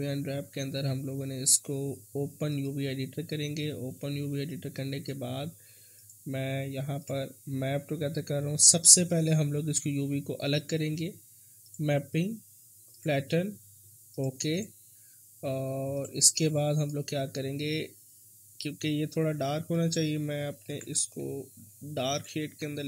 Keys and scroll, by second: 22.4 ctrl+z.